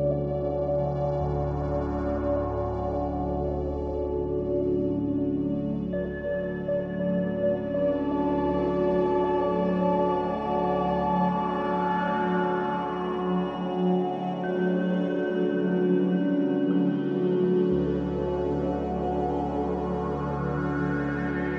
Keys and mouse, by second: 2.0 shift+click, 3.7-4.8 shift+drag, 6.1 shift+click, 6.9-8.6 shift+drag, 10.1-11.9 shift+drag, 13.6 shift+click, 14.3 shift+click, 17.6 ctrl+s, 18.3 ctrl+shift+s.